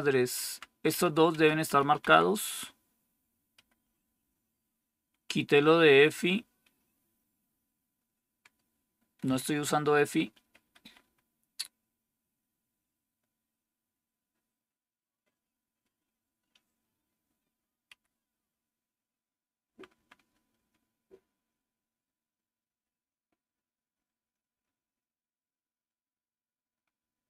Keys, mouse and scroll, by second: 0.3 Down, 0.8 Up, 1.2 Down, 1.6 Up, 1.9 Down, 3.5 Up, 3.9 Up, 3.9 Up, 4.1 Up, 10.3 Up, 10.6 Up, 10.7 Up, 10.9 Up, 17.8 Up, 18.3 Up, 19.6-20.4 Up, 23.8 Up, 24.1 Up, 24.4 Up, 24.7 Up, 26.5 Up, 26.9 Up.